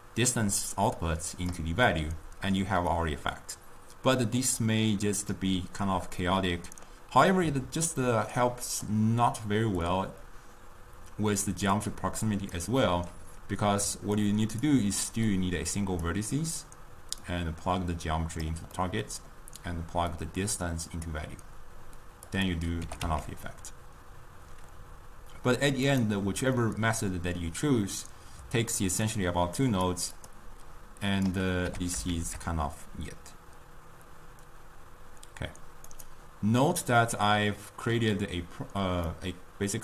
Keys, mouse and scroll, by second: 0.0-3.2 drag, 5.0-6.5 drag, 6.5 middle click, 7.4 click, 9.9-13.2 drag, 14.3 ctrl+right click, 15.9 click, 17.5-19.1 drag, 19.1-20.2 middle drag, 20.2-22.7 drag, 23.0 g, 27.0-29.3 middle drag, 29.3-30.4 drag, 31.2 click, 31.8 g, 37.0-39.8 middle drag.